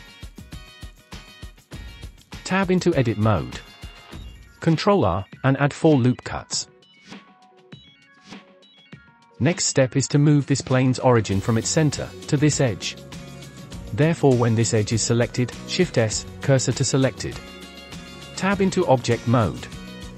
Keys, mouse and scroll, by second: 1.3 click, 1.7 scroll up 2, 2.6 Tab, 4.5 ctrl+r, 7.2-8.5 drag, 9.5 click, 10.0-12.4 drag, 13.9 click, 15.6 shift+s, 18.5 Tab.